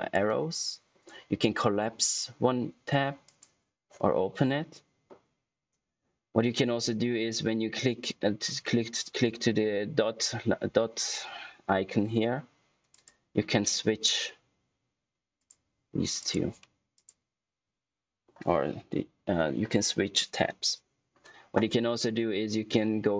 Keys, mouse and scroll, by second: 3.2 click, 12.8 click, 15.4 click.